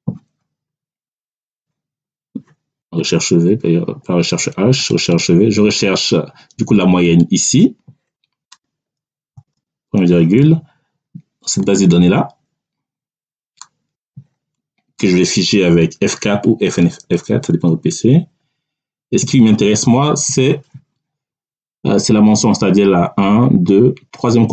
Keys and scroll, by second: 2.7 BackSpace, 9.2 ., 17.4 F4, 19.4 ..